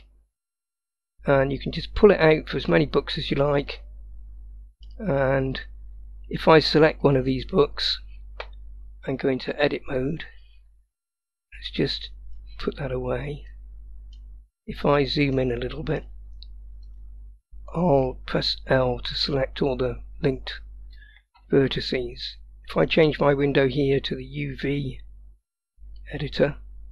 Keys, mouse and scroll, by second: 3.8-4.9 middle drag, 5.3 scroll up 1, 7.1 click, 9.1-10.2 drag, 11.7 click, 13.6 middle click, 14.6-15.4 scroll up 3, 15.4-16.1 middle drag, 16.9 click, 18.8 l, 22.8-26.2 drag.